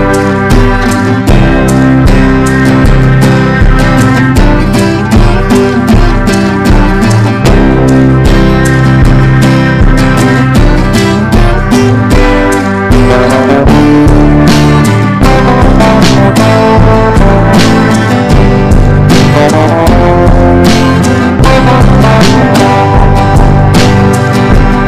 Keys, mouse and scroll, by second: 16.2-24.8 drag.